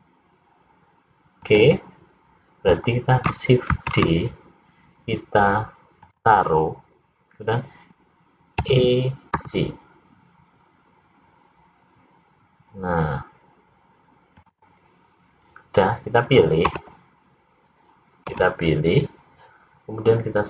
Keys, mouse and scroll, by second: 4.5 shift+d, 9.4 e, 17.5 l, 19.0 l.